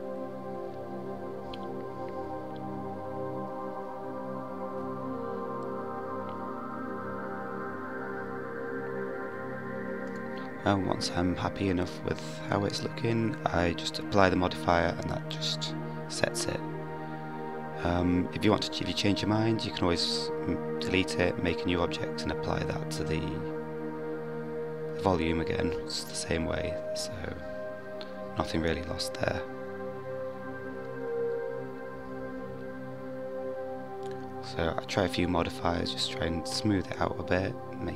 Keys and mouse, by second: 0.0 click, 1.4-3.1 drag, 3.4-4.5 drag, 5.9 g, 9.4 click, 10.9-12.2 middle drag, 16.8-20.8 middle drag, 24.7-28.6 drag, 30.3-32.6 drag, 33.9-36.4 drag, 37.3 click.